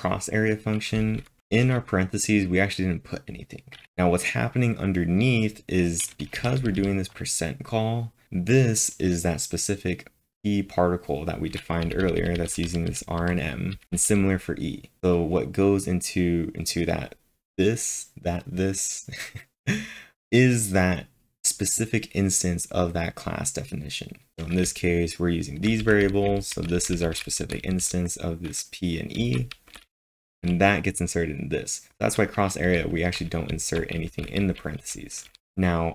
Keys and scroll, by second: 1.0-1.5 typing, 6.4 typing, 11.8-14.1 typing, 24.6-26.3 typing.